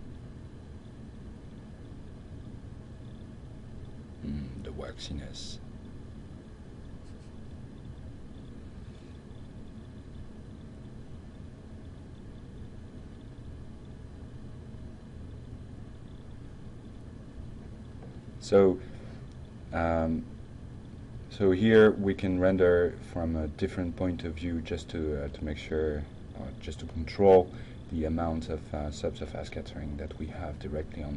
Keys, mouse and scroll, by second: 7.5-11.1 drag, 12.3-13.5 drag, 20.1 click, 22.1 click, 22.6 Tab, 25.3 alt+2, 25.4-26.7 drag, 27.2-27.6 middle drag, 27.9 scroll up 1, 28.4 scroll up 1, 29.1-29.5 drag, 29.9-30.2 middle drag, 30.6-31.1 drag.